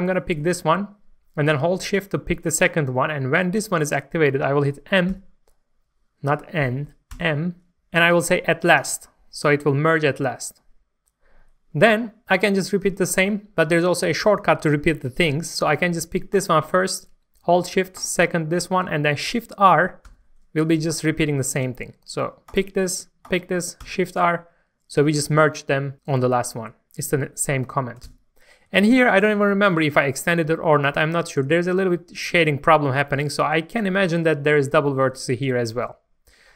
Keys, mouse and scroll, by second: 0.2 shift+middle click, 1.9 shift+click, 5.1 n, 7.1 typing, 8.8-9.9 drag, 18.0 shift+click, 20.0 shift+r, 21.0 shift+middle click, 22.5 click, 23.2 shift+click, 23.8 shift+r, 28.5 scroll up 1, 28.8 shift+middle click, 31.2-33.0 scroll up 1, 35.8 scroll down 1.